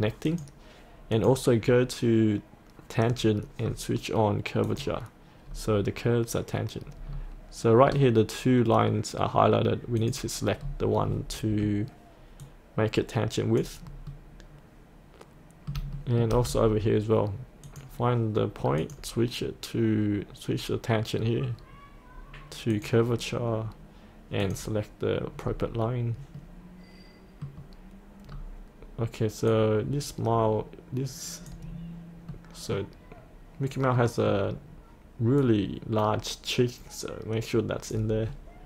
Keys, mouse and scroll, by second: 0.3 click, 3.2-4.7 scroll down 1, 4.7 click, 5.5-7.0 scroll up 1, 7.0-10.0 scroll down 1, 10.0 click, 10.6-12.5 scroll up 1, 12.5 click, 12.9 click, 14.1 middle click, 16.0 shift+middle click, 16.4-17.7 scroll down 1, 17.7 click, 19.4-20.6 scroll down 1, 22.7 click, 25.5-26.4 scroll up 1, 26.4-28.1 middle drag, 28.3-29.5 scroll down 1, 29.5-31.7 drag, 31.7-32.4 scroll up 1, 32.4-35.2 middle drag, 35.4-38.3 drag.